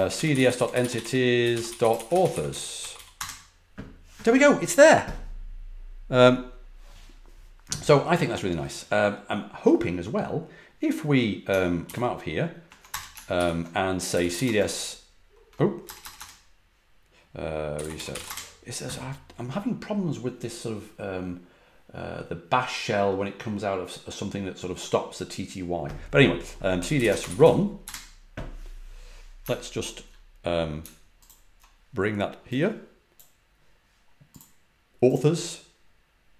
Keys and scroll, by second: 0.0-3.6 typing, 11.8 ctrl+d, 12.8 Return, 13.3 ctrl+c, 13.8-18.7 typing, 26.5-28.2 typing.